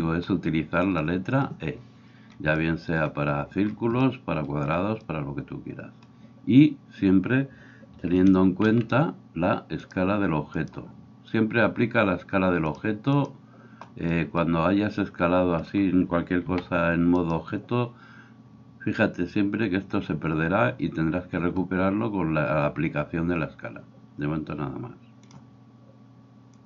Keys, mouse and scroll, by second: 0.0-9.8 middle drag, 8.3 n, 8.7 n, 9.8 click, 10.0-12.8 middle drag, 12.8-26.6 drag, 16.4 s.